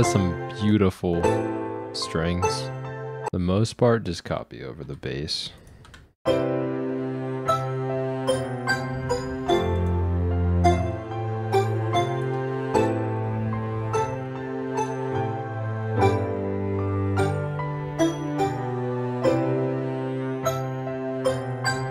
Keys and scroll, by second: 3.3 space, 4.8 ctrl+c, 5.7 ctrl+v, 6.2 space, 6.3 v.